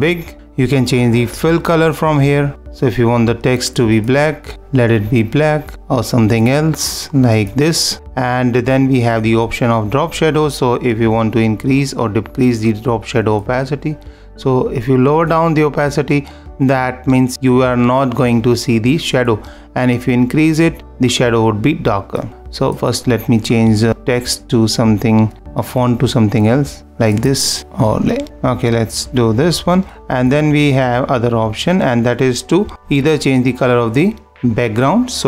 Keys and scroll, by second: 2.3 super+=, 2.5 -, 17.3 super+-.